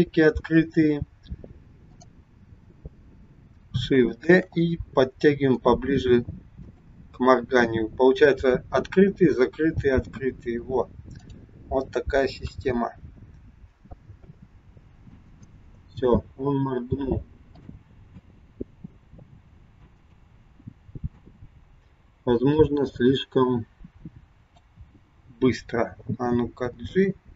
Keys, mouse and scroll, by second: 1.9 click, 4.3 shift+d, 11.3 click, 12.4 KP_1, 14.1 space, 15.9 space, 17.7 click, 18.2 space, 21.2 space, 22.4 click, 26.7 g.